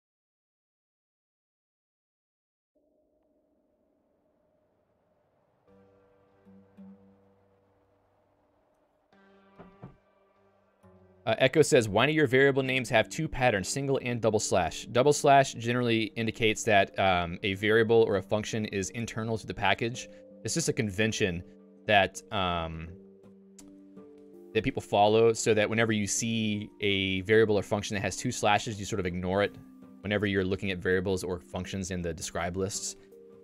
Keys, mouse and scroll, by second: 15.3 click, 15.5-19.0 typing, 16.7 Escape, 20.3 Escape, 22.1 j, 25.6-28.9 typing.